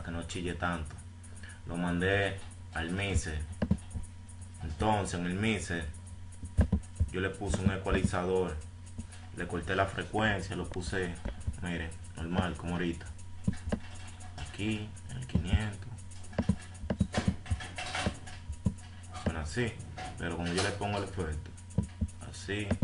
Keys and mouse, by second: 0.3 F1, 3.9-5.6 drag, 7.1-8.2 drag, 11.5 click.